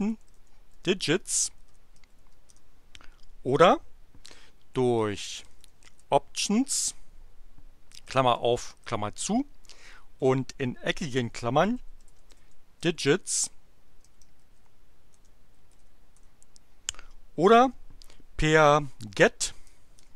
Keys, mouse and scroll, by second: 0.0-0.8 typing, 2.1 shift+9, 2.5 shift+Return, 4.7-6.5 typing, 8.3 shift+8, 8.9 shift+9, 10.1 alt+8, 11.5-13.3 typing, 14.3 alt+shift+9, 15.1 BackSpace, 15.7 alt+9, 16.2 alt+Return, 18.5-19.9 typing.